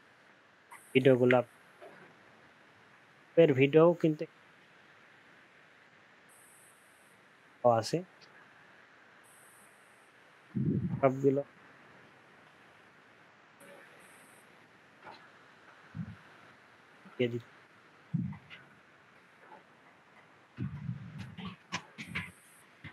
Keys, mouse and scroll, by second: 1.1 ctrl+a, 1.4 typing, 18.9 ctrl+v.